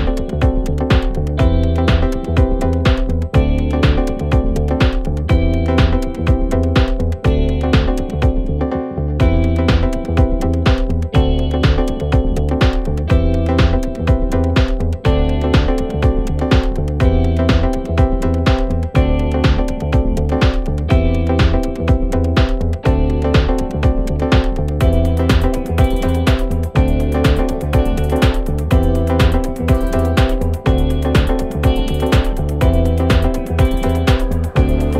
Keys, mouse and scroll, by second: 0.0 s, 0.9 g, 1.6 s, 2.7 scroll up 2, 2.8 scroll down 1, 2.8 scroll up 1, 3.0 s, 3.5 s, 5.9 g, 7.1 g, 10.4-11.2 scroll down 3, 10.5 middle click, 11.2 g, 13.1 KP_7, 13.4 scroll up 1, 13.5 scroll down 1, 13.5-13.9 scroll up 6, 14.3 click, 14.9 h, 15.3 click, 15.7 g, 17.1-18.3 scroll down 1, 18.3 scroll down 3, 18.5-20.1 middle drag, 21.0-22.1 middle drag, 22.1 z, 23.0 g, 24.4-25.0 middle drag, 25.0 shift+d, 25.5 g, 26.7 shift+d, 27.2 g, 28.6 shift+d, 29.1 g, 30.3 shift+d, 30.8 g, 32.9 click, 33.1 scroll down 1, 33.2-34.8 middle drag.